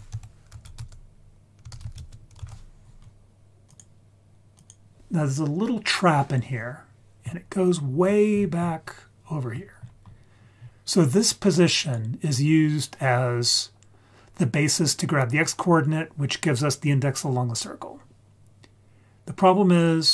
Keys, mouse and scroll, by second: 7.4-9.2 scroll down 8, 9.2 scroll down 1, 10.5-11.4 scroll down 1, 11.4 click, 11.7 click.